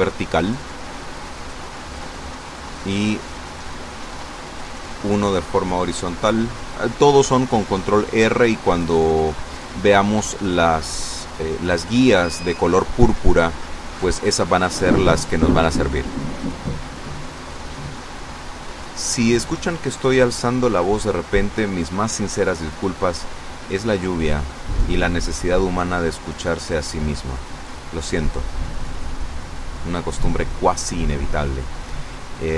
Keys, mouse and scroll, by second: 1.7 ctrl+r, 2.2 ctrl+click, 3.7 click, 5.1 a, 6.9 right click, 8.8 right click, 11.0 shift+right click, 17.0 shift+right click, 21.3-24.2 drag, 24.7-26.7 drag.